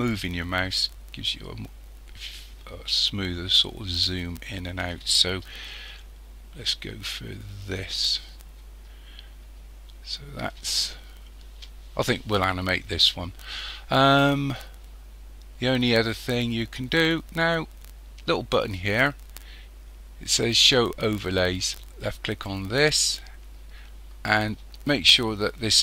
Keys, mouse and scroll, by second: 5.7-8.7 shift+middle drag, 22.1 click.